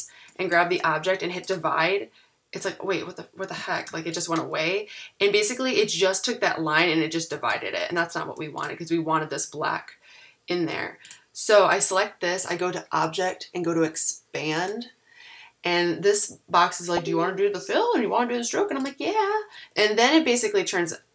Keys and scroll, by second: 3.8 shift+super+g, 7.4 super+z.